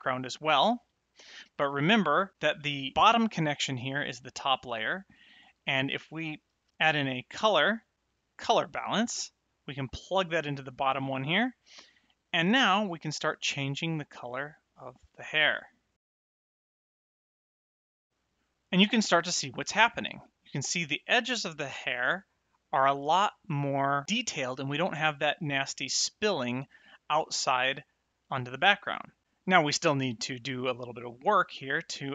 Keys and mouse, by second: 1.9 middle click, 6.5 shift+a, 8.3 click, 10.8 click, 13.2 click, 21.1 middle click, 22.9 middle click, 25.4 middle click, 26.6 middle click, 28.5 middle click, 30.0 middle click.